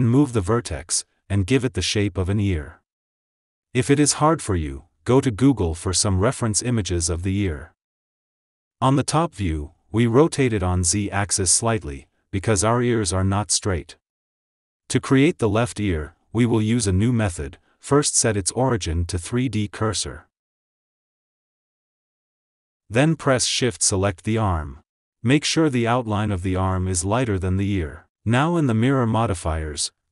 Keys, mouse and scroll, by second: 0.1 click, 0.8 g, 2.3 r, 2.8 click, 3.0 g, 3.4 click, 3.6 g, 4.4 click, 4.7 g, 6.5 click, 6.6 g, 8.4 Tab, 8.7 click, 9.2 KP_7, 9.5 Tab, 10.8 alt+z, 11.4 click, 12.5 ctrl+z, 12.9 g, 14.1 Tab, 14.5-15.8 scroll up 1, 15.8 click, 16.5 click, 17.6 click, 19.9-23.0 drag, 24.1 shift+click.